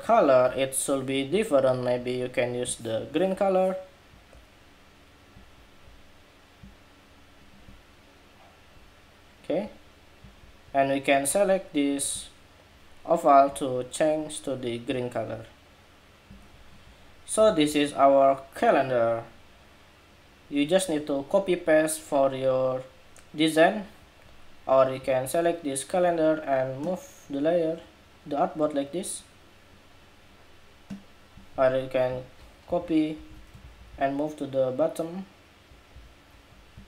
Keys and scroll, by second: 17.2 super+-, 32.4 super+c, 32.9 super+v.